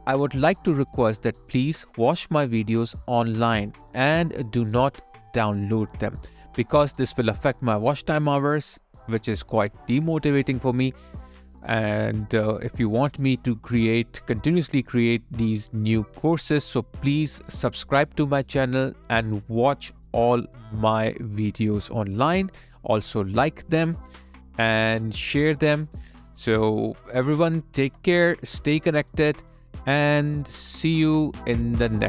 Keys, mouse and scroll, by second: 14.6 alt+click.